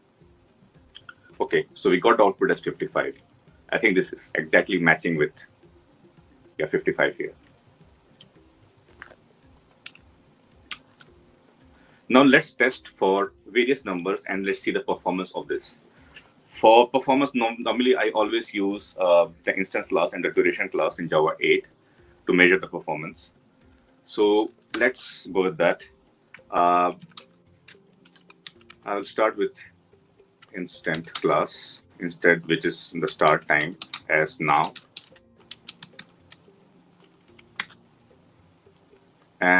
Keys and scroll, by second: 37.4 Return.